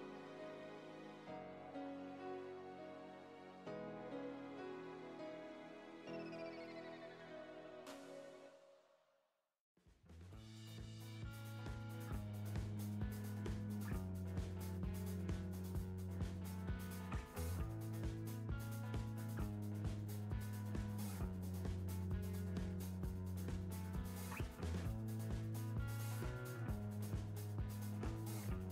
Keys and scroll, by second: 5.7 Right, 14.4 Right, 23.8 Right, 28.5 Right.